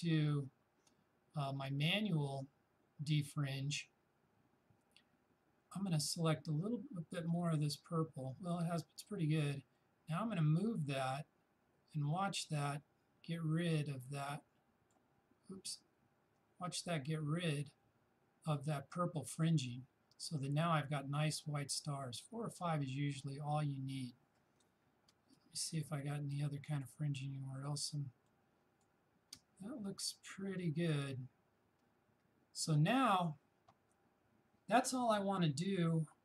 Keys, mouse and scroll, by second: 9.8-25.2 drag, 25.2 space, 25.4 click, 25.6 space, 26.3 click, 26.5 space, 27.2 click, 27.3 space, 28.3 click, 28.6 space, 33.1 click.